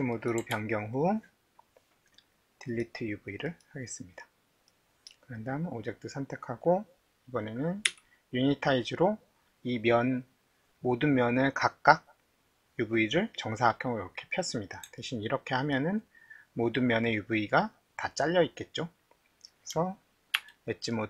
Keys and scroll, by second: 0.5 alt+`, 7.9 u, 20.4 alt+2.